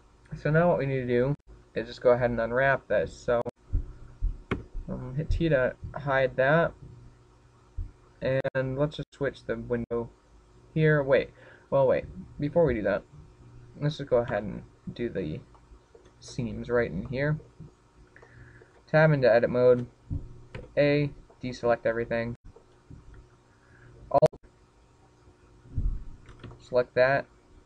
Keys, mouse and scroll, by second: 6.5 t, 8.9 click, 11.1 click, 16.4 Tab, 17.1-17.6 scroll down 1, 17.6 shift+middle click, 18.3 middle click, 19.2 shift+middle click, 19.8-20.2 scroll up 5, 20.3 shift+middle click, 21.1-21.7 scroll up 2, 21.5 shift+middle click, 22.6 a, 23.8-24.3 scroll up 1, 24.5 shift+middle click, 25.0-25.3 scroll up 5.